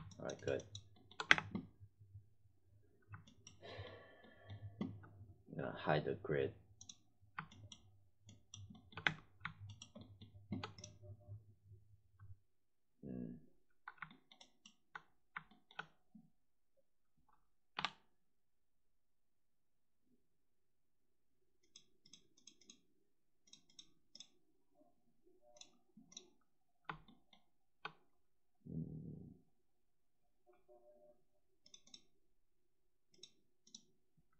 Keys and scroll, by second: 1.2 space, 8.9 space, 17.7 3.